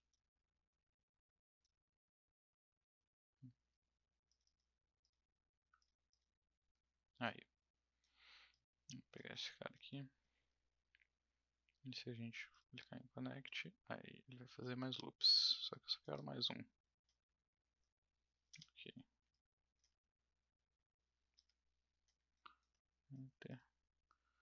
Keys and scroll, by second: 15.8 1, 18.5 Return, 21.3 Return.